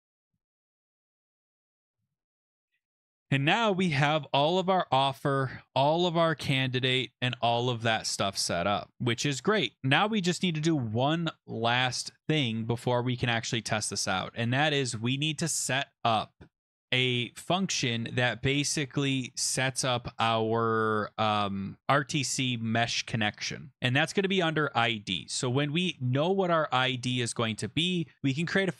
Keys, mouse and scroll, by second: 1.4 click, 1.6-2.4 scroll down 12, 2.4-4.5 scroll, 5.1-5.4 scroll, 6.1 click, 6.3 click, 7.2 ctrl+f, 8.9 click, 11.4-13.1 scroll, 14.3 scroll, 18.3-19.0 scroll, 24.3 click, 25.8 Return.